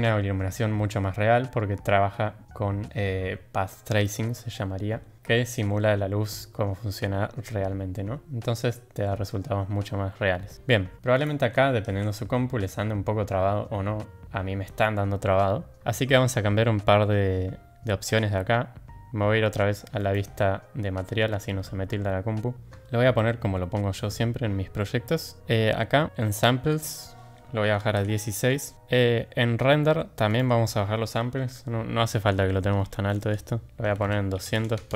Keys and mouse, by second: 20.1 click, 26.8-28.3 drag, 30.4-34.8 drag.